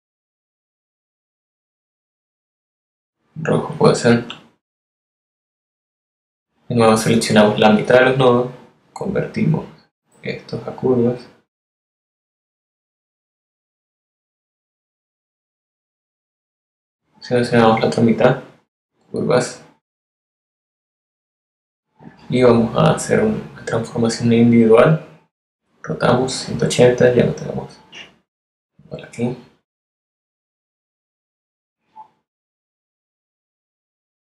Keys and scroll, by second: 4.1 a, 19.8 a.